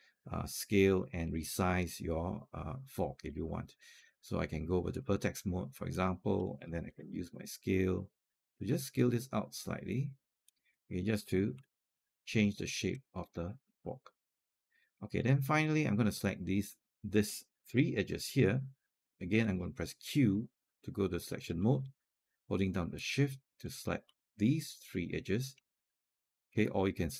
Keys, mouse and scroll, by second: 0.6 alt+scroll down 1, 4.1 right click, 5.2-6.7 drag, 6.7 r, 7.8-10.5 drag, 11.4 alt+click, 13.5 alt+middle click, 13.8 alt+click, 14.2 alt+middle click, 14.5 alt+click, 15.0 alt+click, 16.0 right click, 17.5 click, 20.1 q, 22.6 shift+click, 23.4 shift+click, 24.8 alt+middle click, 26.3 click.